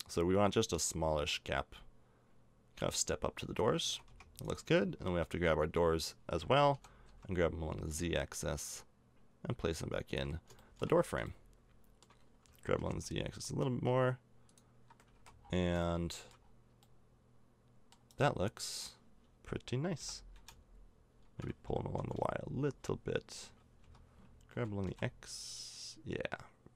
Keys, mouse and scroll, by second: 3.9 a, 4.1 Tab, 6.7 g, 10.3 middle click, 11.4-12.4 middle drag, 12.8 g, 15.2 a, 15.4 middle click, 17.4 middle click, 17.9 right click, 18.7 middle click, 20.0 g, 25.1 g.